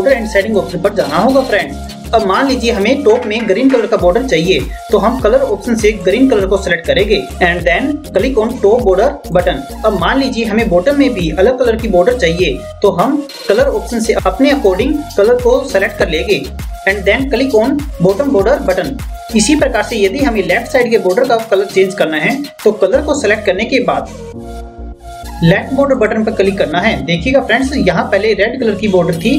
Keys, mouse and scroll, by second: 5.2 click, 8.6 click, 13.5 click, 15.4 click, 17.9 click, 22.7 click, 25.3 click.